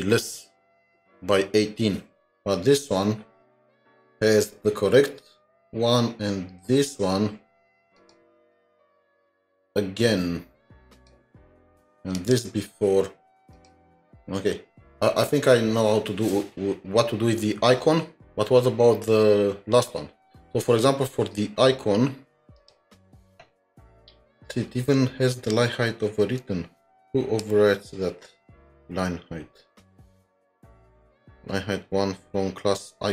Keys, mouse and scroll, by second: 6.9-7.4 scroll up 1, 22.4 scroll down 6, 25.3-25.9 scroll down 1, 25.9-26.9 scroll up 2.